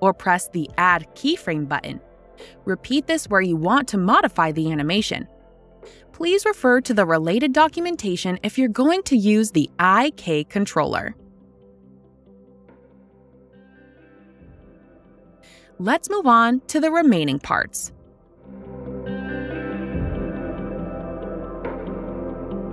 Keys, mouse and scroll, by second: 3.0 click, 5.5 click, 8.6 right click, 10.4 click, 17.6 click, 20.9 click.